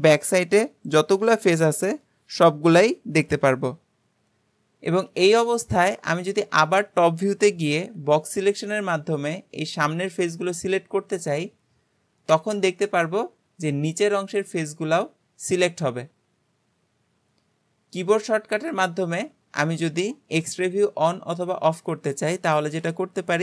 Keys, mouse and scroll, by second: 5.1 KP_7, 6.6 alt+a, 7.9 b, 12.4 alt+z, 12.9-15.9 middle drag, 19.2 Tab.